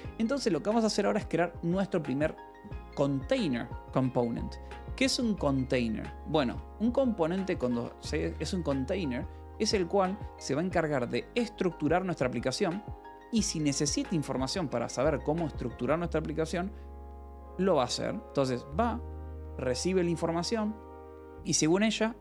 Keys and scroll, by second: 6.1-8.5 typing.